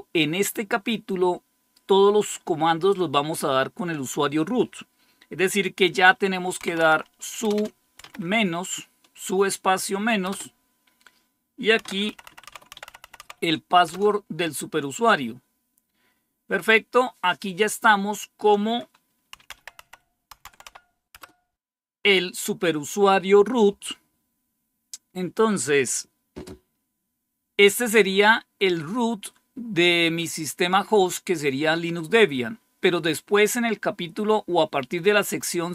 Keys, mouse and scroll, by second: 6.5-7.9 typing, 10.2 typing, 11.5-13.8 typing, 19.0-21.1 typing.